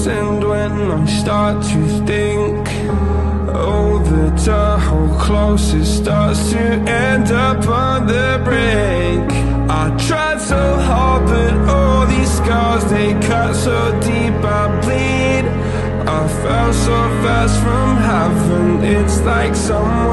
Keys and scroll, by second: 1.7 space, 2.9 super+-, 6.4 super+space, 7.7 space.